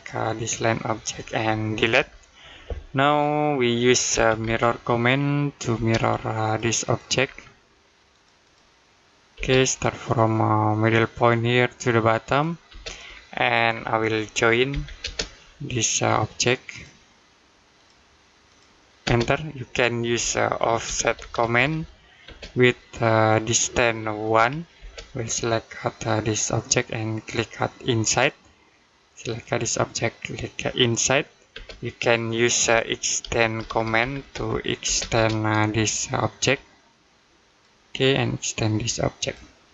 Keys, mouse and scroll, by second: 1.8 Delete, 3.0 middle click, 3.9 m, 5.6 space, 6.3 click, 7.1-7.9 scroll up 1, 7.9 click, 10.8 click, 12.5 space, 13.1 middle click, 13.5-14.5 scroll down 1, 14.5 j, 14.8 space, 15.5 click, 18.9 space, 20.0 o, 22.1 space, 24.2 1, 24.6 space, 26.3 click, 31.4 space, 32.5 e, 34.7 space, 37.3 click.